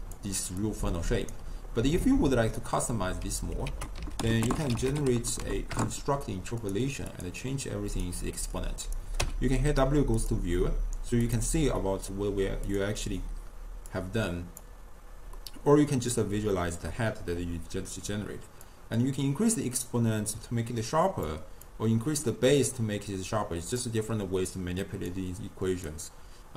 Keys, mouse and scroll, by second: 0.2-0.6 d, 0.7 right click, 1.4 d, 1.5 d, 2.5 click, 3.7 ctrl+a, 7.1-9.3 drag, 9.3 w, 11.8-13.1 middle drag, 13.1-13.6 drag, 14.0 drag, 15.5-17.5 middle drag, 17.5-18.7 scroll up 1, 18.7-25.9 drag, 26.1-26.5 drag.